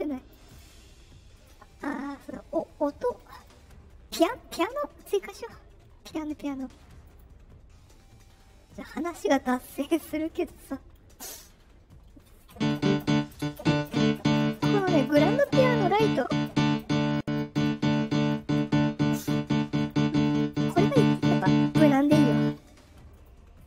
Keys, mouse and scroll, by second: 0.4 click, 1.3 right click, 3.1 click, 4.3 click, 7.0 click, 10.2 click, 17.1 click, 18.0-19.8 drag, 20.2 click, 23.0 click.